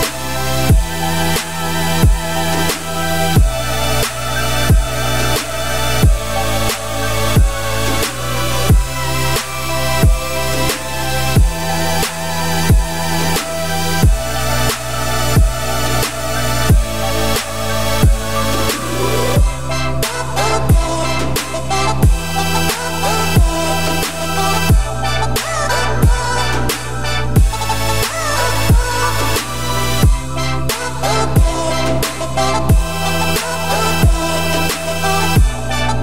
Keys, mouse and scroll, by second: 2.6-3.0 scroll down 4, 3.0 e, 3.9 scroll down 2, 4.1 middle click, 4.9-8.0 scroll up 2, 5.3 middle click, 8.7 Tab, 9.3 ctrl+s, 25.4 middle click, 25.8 Tab, 26.1-26.4 scroll up 2, 26.4 shift+middle click, 26.8 click, 27.1 2, 27.3 click, 27.5 scroll up 1, 27.5 middle click, 28.4 3, 28.6 click, 29.7 x, 31.2 click, 31.5 middle click, 31.9-32.6 scroll up 1, 32.6 i.